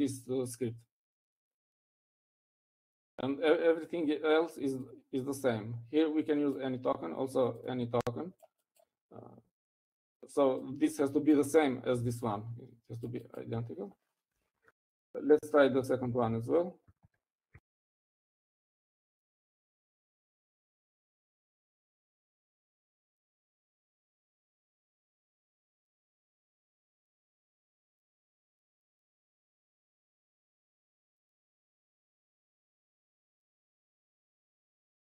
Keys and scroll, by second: 15.8-16.8 typing, 18.1-21.8 typing.